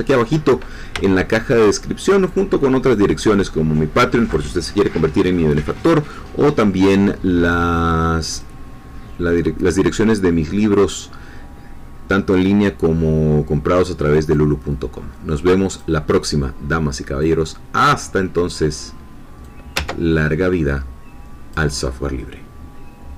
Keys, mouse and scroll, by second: 1.0 shift+middle click, 2.2-4.5 drag, 8.4-11.0 drag, 14.3-16.0 drag, 17.2-23.1 drag.